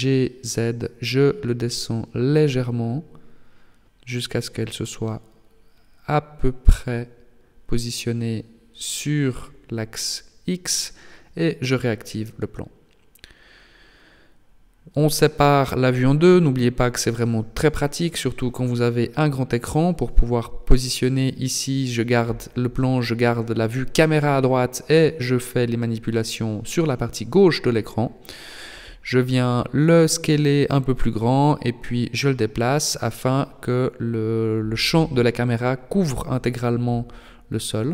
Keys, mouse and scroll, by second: 3.4 g, 6.8 shift+click, 7.3 scroll down 5, 8.6 shift+middle click, 10.8 alt+h, 12.0 KP_0, 12.6 scroll down 2, 13.5 right click, 15.4 click, 17.4 right click, 18.1 KP_7, 18.7 scroll down 4, 19.9 g, 21.6 s, 22.8 g, 25.3 s, 27.5 g, 33.6 middle click, 34.4 shift+middle click, 35.1 middle click.